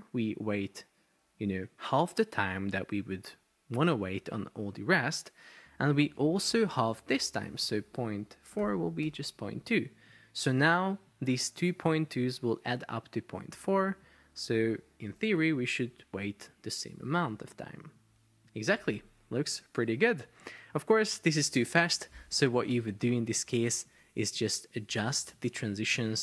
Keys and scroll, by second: 8.3-9.5 typing, 15.3 super+p, 20.3 Escape.